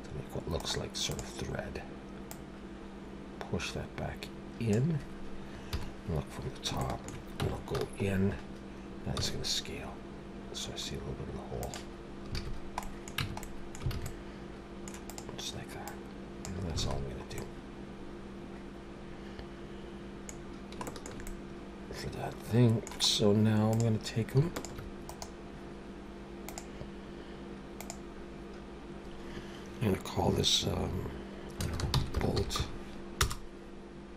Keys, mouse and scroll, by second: 0.6 right click, 2.3 click, 5.7 KP_7, 6.8 shift+middle click, 7.4 Tab, 7.8 a, 8.1-9.2 scroll up 3, 9.2 s, 12.4 alt+a, 12.5-13.2 scroll down 3, 12.8 middle click, 13.2 Tab, 13.4 middle click, 13.9 alt+a, 14.0 middle click, 15.1 click, 15.8 click, 16.8 alt+a, 17.0-17.3 scroll down 3, 17.4 middle click, 20.4-20.8 scroll down 2, 20.8 shift+middle click, 21.3 middle click, 23.0-23.5 scroll up 2, 23.7 click, 24.5 shift+click, 25.1 right click.